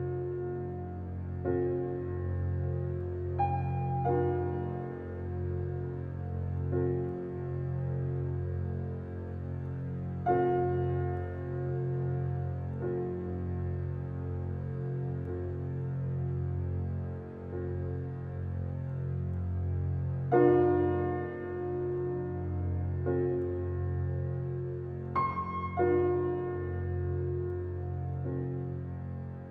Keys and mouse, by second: 0.0-0.7 drag, 1.0-1.5 drag, 1.8-2.2 drag, 2.4 click, 3.2-4.0 drag, 4.6-5.5 drag, 5.9 click, 6.3-6.7 drag, 7.0 click, 8.6 click, 10.1 click, 11.9 click, 12.9 click, 13.5 click, 13.7 Return, 13.8 Return, 14.8-20.8 typing, 21.9-29.5 typing.